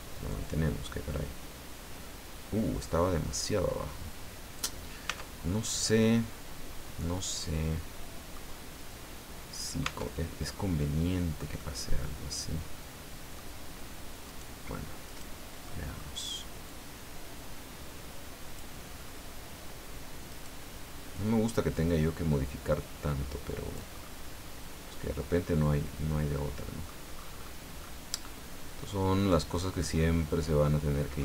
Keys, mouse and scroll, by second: 0.3-4.2 drag, 4.2 scroll down 2, 5.1 Tab, 5.4 scroll down 2, 5.8-8.5 middle drag, 9.8 Tab, 10.5-11.5 middle drag, 14.2 right click, 15.0 right click, 15.6 middle click, 16.6-18.7 drag, 18.9-19.3 scroll up 1, 20.3 right click, 21.7-23.9 drag, 23.9-24.3 scroll down 1, 24.9-27.0 middle drag, 27.1-27.6 scroll up 1, 27.8 scroll up 1, 29.2 right click, 29.8-30.8 middle drag, 31.1 shift+middle click.